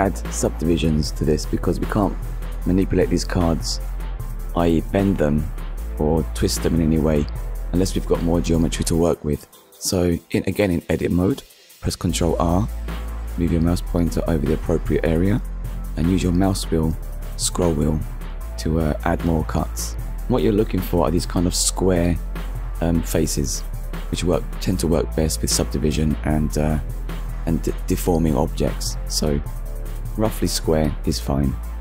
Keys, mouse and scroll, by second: 0.6-1.0 scroll up 1, 1.2-1.5 scroll up 1, 2.8 scroll up 1, 3.5 click, 3.8 right click, 5.1 click, 6.8 click, 9.7 click, 12.1 ctrl+r, 12.8 scroll up 1, 13.7-14.0 scroll up 1, 14.3-14.7 scroll up 1, 15.5 click, 15.8 right click, 18.1 click, 19.7 click, 23.9 click, 25.3 Tab, 25.7 click, 26.1 middle click, 27.3 ctrl+s, 27.9 middle click, 30.0 shift+middle click.